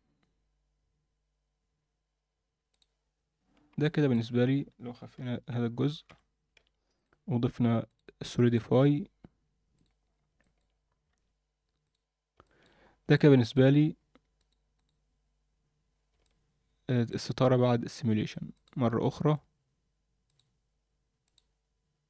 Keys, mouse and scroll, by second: 2.7 click, 3.8-4.2 middle drag, 5.2 g, 6.5 h, 7.0 click, 7.9 drag, 8.4-9.8 drag, 10.4 middle drag, 10.8 scroll up 1, 11.1 ctrl+a, 12.4 alt+middle drag, 12.8 scroll up 2, 13.1-13.5 alt+middle drag, 13.7-14.4 scroll down 2, 14.4-15.5 right drag, 15.9 scroll down 1, 16.2-17.0 alt+middle drag, 18.5 drag, 20.3 click, 21.2 click.